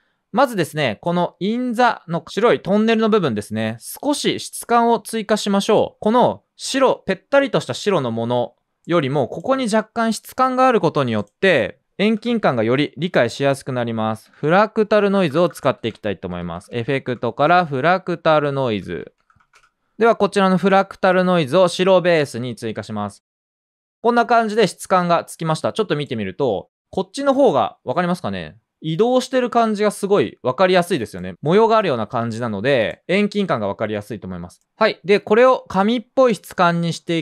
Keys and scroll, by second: 12.1 BackSpace, 13.7-19.7 typing, 26.2-28.2 typing.